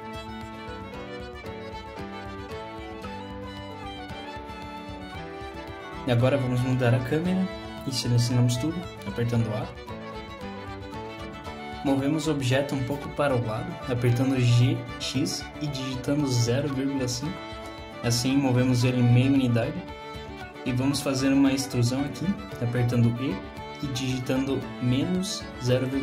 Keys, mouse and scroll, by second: 0.2 click, 0.9 click, 1.3 g, 1.6 click, 2.6 g, 2.9 click, 3.5 g, 3.7-4.3 scroll down 3, 4.3 shift+middle click, 6.5 click, 7.8 middle click, 8.5-9.2 scroll down 3, 8.8 middle click, 10.5 a, 11.3 middle click, 13.0 g, 21.1 e.